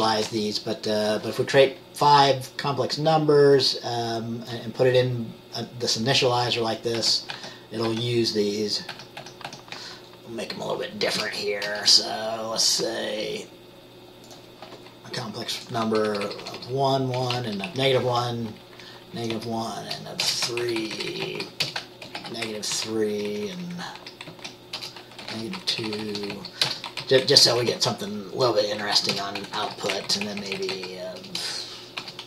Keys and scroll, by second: 0.0-3.4 typing, 7.1 ctrl+c, 7.5 ctrl+v, 8.0 ctrl+v, 9.3 ctrl+v, 9.3 ctrl+v, 9.6 ctrl+v, 11.4 BackSpace, 11.8 BackSpace, 15.7 -, 16.0 Right, 16.2 Right, 16.4 Right, 16.5 Right, 17.3 -, 17.5 Down, 17.8 Left, 18.0 Left, 18.2 Left, 18.8 Left, 19.3 Left, 19.7 Left, 19.9-20.4 typing, 20.7 Right, 21.3 Right, 21.5 Right, 21.8-23.6 typing, 22.9 Down, 23.2 Left, 23.8 Left, 24.1 Left, 24.4 Left, 24.6-32.2 typing, 31.0 Right.